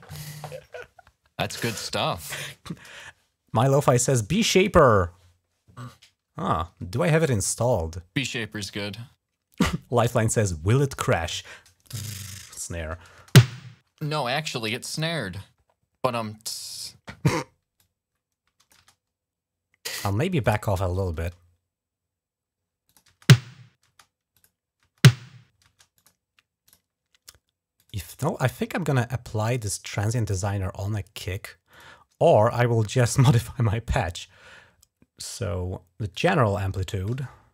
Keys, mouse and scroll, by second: 13.0 space, 13.8 space, 17.6 click, 18.6 space, 20.1 click, 20.9 space, 22.6 click, 22.9-23.6 typing, 24.1 click, 25.7 click, 26.4 click, 27.5 click, 31.5 click, 32.7 click, 32.9 click, 35.9 click.